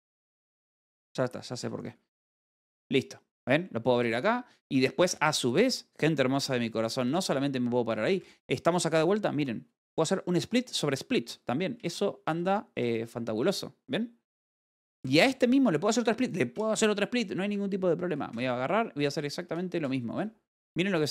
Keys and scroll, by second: 1.6 Escape, 5.7-6.7 typing, 8.5 h, 12.3 space, 12.7 w, 13.3 e, 18.7 space, 18.8 w.